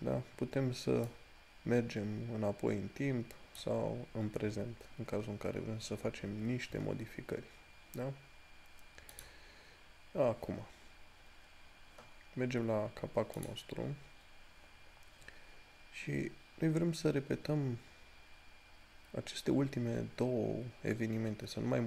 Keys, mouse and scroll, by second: 1.4-5.0 drag, 5.0 scroll down 1, 5.9-8.1 scroll up 1, 9.4 click, 11.4 scroll up 1, 14.4 scroll down 1.